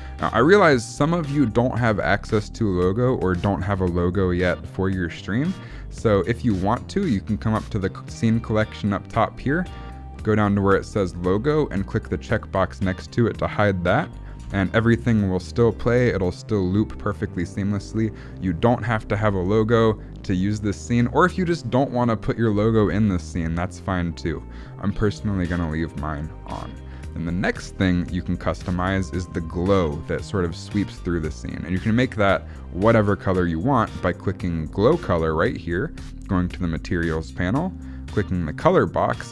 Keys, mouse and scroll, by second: 0.5 space, 0.9 click, 12.3 click, 14.1 click, 14.5 space, 22.9 space, 23.2 click, 26.5 click, 28.0 click, 34.6 click, 36.6 click, 38.5 click.